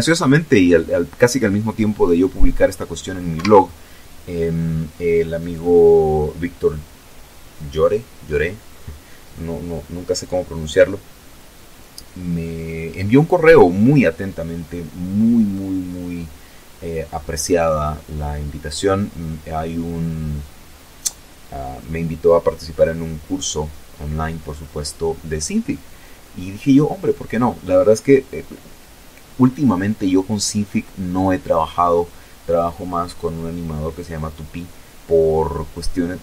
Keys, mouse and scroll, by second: 1.0 Escape, 3.1 right click, 3.5 middle click.